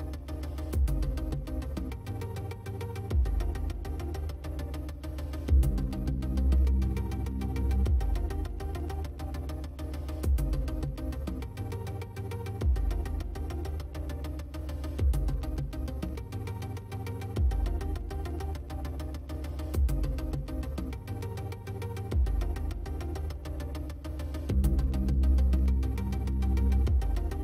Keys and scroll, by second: 0.4 ctrl+space.